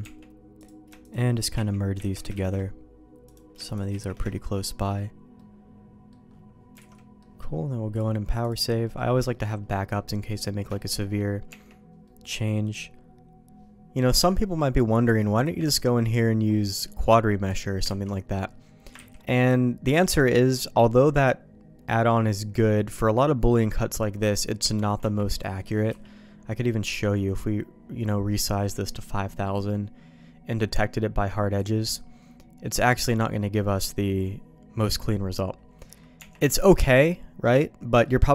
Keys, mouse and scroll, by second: 0.5 click, 1.0 shift+click, 1.9 1, 1.9 ctrl+z, 3.2 click, 3.6 shift+click, 3.8 shift+1, 4.2 shift+middle click, 5.3 middle click, 6.8 alt+a, 6.9 middle click, 8.0 click, 8.8 middle click, 9.2 shift+middle click, 9.9 middle click, 10.6 shift+middle click, 11.4 Tab, 14.0 middle click, 14.6 middle click, 15.3 click, 15.6 ctrl+x, 15.9 middle click, 16.7 middle click, 17.5 click, 17.9 ctrl+x, 19.5 ctrl+s, 19.5 middle click, 21.8 middle click, 24.2 middle click, 25.0 Tab, 25.4 middle click, 25.9 n, 32.2-34.8 drag, 35.0 middle click, 36.2 Tab, 36.7-38.0 middle drag.